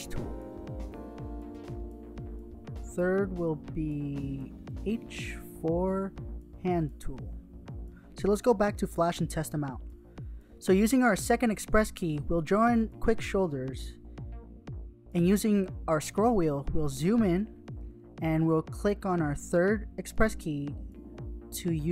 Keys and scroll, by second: 0.0-1.4 typing, 4.4 h, 5.8-7.4 typing, 19.6 h, 20.4 h.